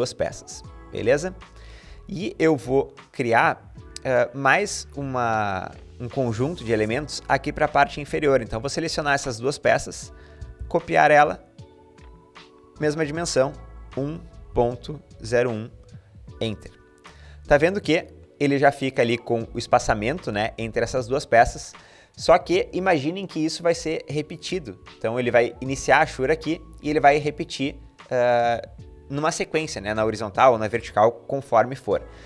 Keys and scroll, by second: 0.0-0.5 typing, 10.1 typing, 11.4-12.1 typing, 13.4-15.4 typing, 15.5 Return, 16.8-17.6 typing.